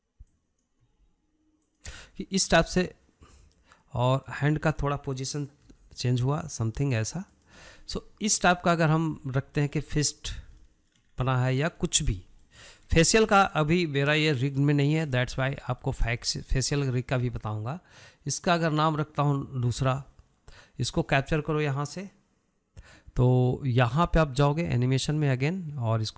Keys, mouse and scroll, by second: 0.3 r, 2.5 r, 3.6-5.8 middle drag, 5.8 drag, 6.1-7.3 middle drag, 7.3 r, 9.3 scroll down 1, 9.5-10.5 middle drag, 10.5-10.8 scroll down 3, 11.0-12.8 shift+middle drag, 12.8 scroll up 1, 13.0-17.7 shift+middle drag, 17.7 scroll up 1, 17.8-21.5 shift+middle drag.